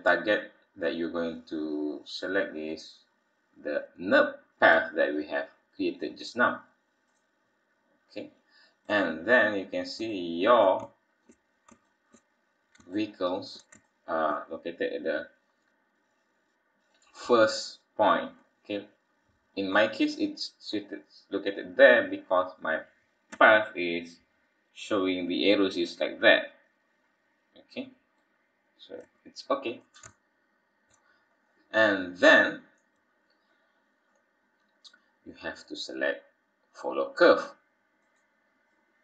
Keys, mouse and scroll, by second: 1.4-2.6 scroll down 1, 2.6 click, 8.0-9.4 scroll down 10, 9.4-9.9 scroll up 5, 10.1 shift+middle click, 10.9 shift+middle click, 11.8 shift+middle click, 12.3-12.9 scroll up 3, 12.9 shift+middle click, 13.9 shift+middle click, 14.9-15.6 scroll down 6, 15.8-16.9 scroll up 3, 17.2 scroll down 1, 17.9-18.8 scroll down 2, 19.4-19.8 scroll down 2, 19.7-22.3 scroll up 4, 22.3 click, 23.3 Tab, 23.9-24.6 scroll down 1, 24.6-25.3 scroll down 1, 28.1-29.1 scroll up 4, 29.1 Tab, 29.1-30.0 scroll up 1, 30.1 shift+middle click, 31.3-31.8 scroll up 4, 32.2 click, 38.0 click.